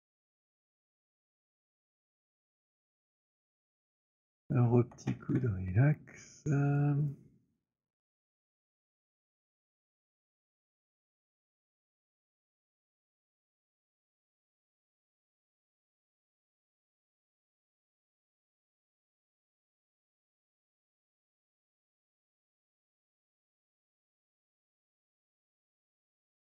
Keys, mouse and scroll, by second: 1.6-2.0 alt+scroll, 2.1 click, 3.3 alt+click, 3.6-4.1 scroll, 4.4 alt+click, 4.8 w, 6.7 right click, 6.9 click, 8.4 click, 11.1 click, 12.6 click, 13.1 click, 14.6 click, 17.9 click, 20.1 click, 22.1 click, 25.9 click.